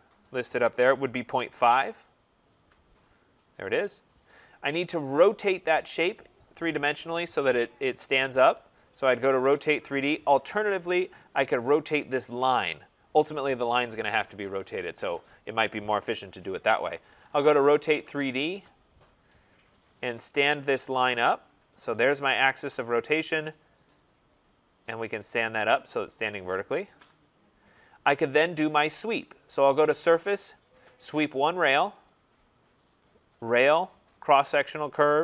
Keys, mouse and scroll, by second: 0.8-1.8 typing, 2.4 Return, 4.0-5.1 scroll, 5.3 click, 10.1 click, 10.4 Escape, 11.4 click, 11.8-13.8 scroll, 16.6-18.6 typing, 19.5 scroll, 20.7 click, 22.1 click, 22.5 scroll, 24.5 click, 25.3 click, 26.0 click, 27.1 middle click, 28.0 middle click, 28.2 middle click, 29.7 click, 31.5 click, 33.1 scroll, 33.4 click, 34.7 click.